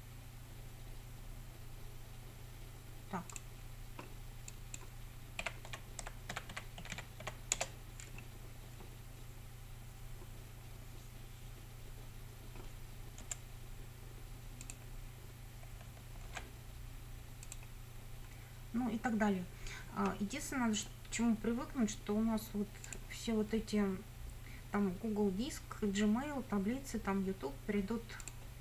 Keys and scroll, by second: 5.2-7.8 typing, 13.3 F9, 16.3 ctrl+v.